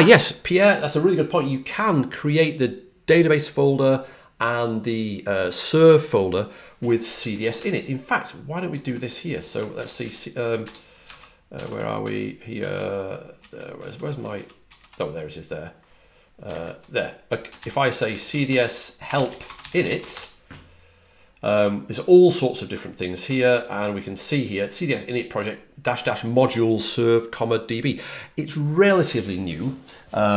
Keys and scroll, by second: 5.7 typing, 8.6 super+Tab, 9.7 ctrl+l, 10.5 typing, 11.5 super+Tab, 12.5 super+Tab, 12.7 super+Tab, 13.3 super+Tab, 16.4 super+`, 18.0-20.5 typing.